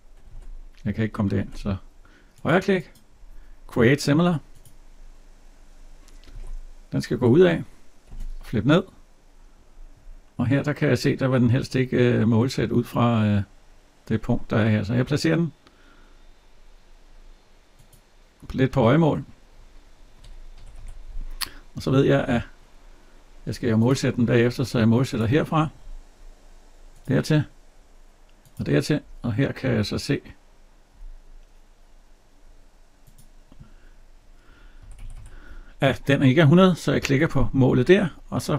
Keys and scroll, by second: 6.1 alt+Tab, 20.3 Escape, 34.6 Escape.